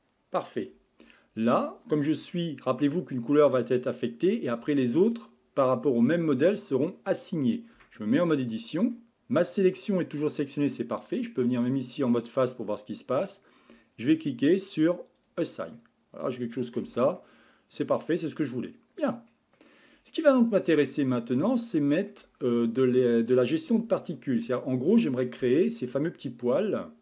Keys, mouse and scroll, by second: 2.6-5.8 middle drag, 7.8 Tab, 8.9-12.0 middle drag, 12.0 click, 12.5-15.2 middle drag, 15.2 click, 15.8-16.9 middle drag, 16.9 Tab, 17.2-20.4 middle drag, 20.6 scroll down 3, 20.9-22.9 middle drag, 22.9-23.6 scroll up 3, 23.6-24.0 scroll down 2, 24.0-27.0 shift+middle drag.